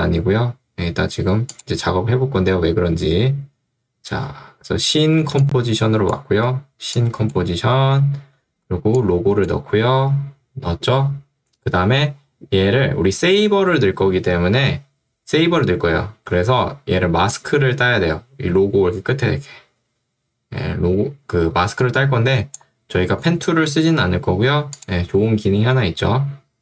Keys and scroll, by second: 5.3 ctrl+2, 7.9 Escape, 16.3 2, 23.9 Escape.